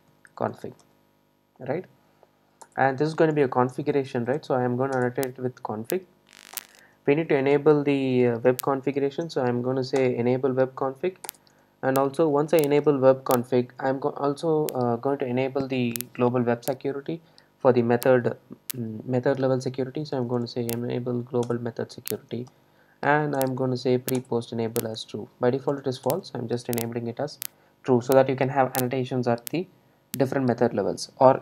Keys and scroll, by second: 5.0 Return, 10.1 Return, 21.5 Return.